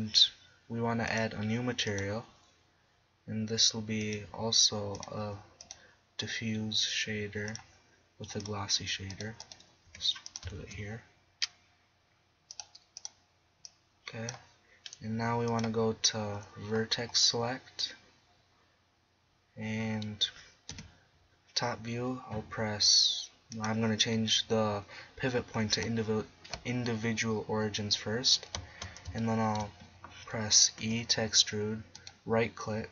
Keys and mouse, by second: 3.7 middle click, 7.5 middle click, 9.1-9.4 right drag, 9.9 g, 10.6 shift+a, 12.2 click, 12.7 click, 13.2 click, 17.3-17.9 middle drag, 19.0-20.7 middle drag, 20.7 KP_7, 25.6 click, 30.8 e.